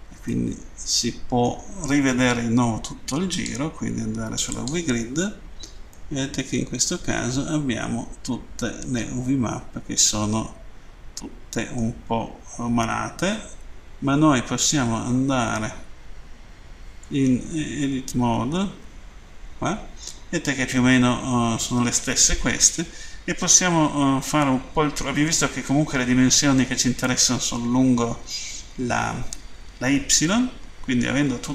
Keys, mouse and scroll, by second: 0.3 middle click, 3.3 click, 4.5 click, 6.0 middle click, 12.8 a, 17.3 Tab, 18.5-18.9 typing, 20.0 scroll down 1.